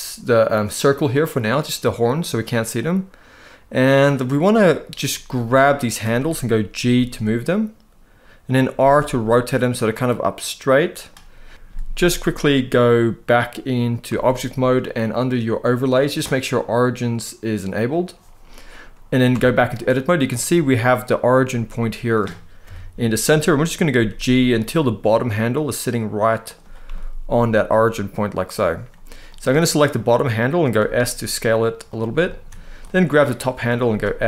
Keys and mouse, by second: 1.7 click, 5.2 click, 6.5 g, 8.5 r, 10.7 click, 13.8 Tab, 15.5-17.9 drag, 19.0 Tab, 20.1 middle click, 22.4 KP_1, 23.6 g, 26.6-28.0 middle drag, 29.0 click, 29.6 middle click, 30.5 s, 31.6 click, 31.9 middle click, 32.5 click, 33.1 middle click, 33.6 s.